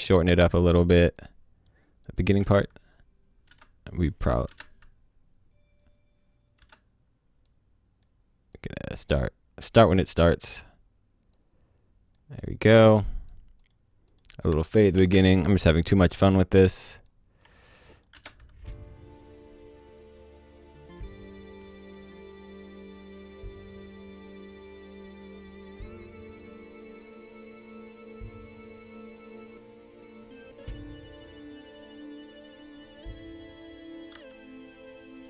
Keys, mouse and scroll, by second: 0.1 click, 2.4 space, 6.6 space, 7.4 click, 10.1 scroll up 1, 11.3 click, 14.9 ctrl+shift+d, 16.1 click, 18.1 space, 34.0 click, 34.1 c, 35.2 click.